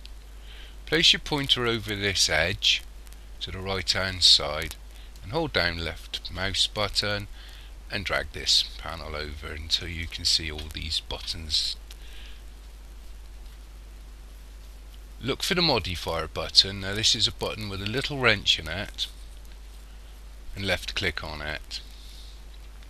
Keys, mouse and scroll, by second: 5.2 click, 20.6 click.